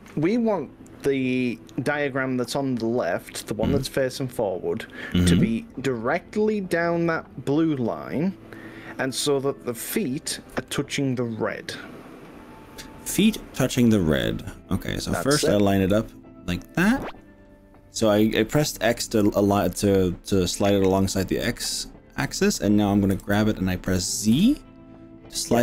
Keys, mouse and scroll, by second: 9.0 g, 10.6 x, 16.0 click, 17.0 click, 23.2 g, 24.4 z.